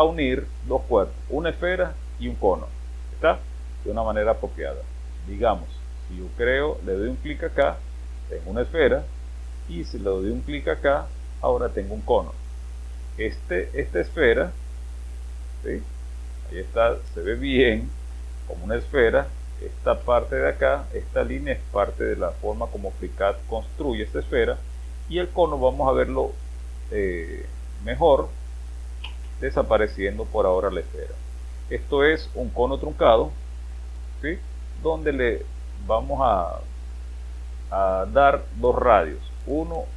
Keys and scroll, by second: 29.0 space.